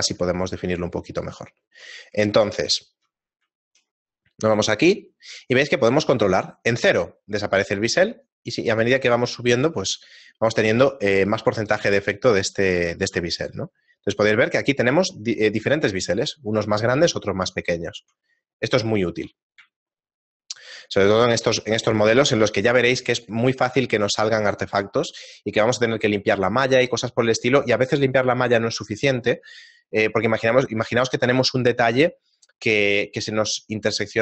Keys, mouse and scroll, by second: 0.3 ctrl+middle click, 1.5 ctrl+middle click, 1.9 middle click, 2.4 shift+middle click, 2.7 shift+middle click, 2.9 ctrl+middle click, 3.3 middle click, 3.6 shift+middle click, 5.7 click, 12.7 Tab, 13.3 scroll down 2, 15.6 right click, 15.6-16.0 scroll down 2, 16.0 shift+middle click, 17.6 shift+middle click, 18.3 middle click, 19.3 shift+middle click, 19.9 shift+middle click, 21.6 shift+middle click, 31.0 shift+middle click.